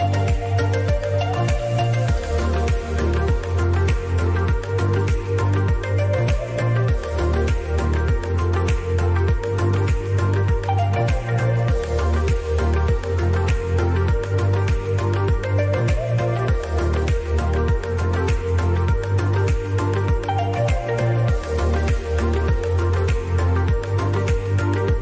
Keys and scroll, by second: 16.6 Delete.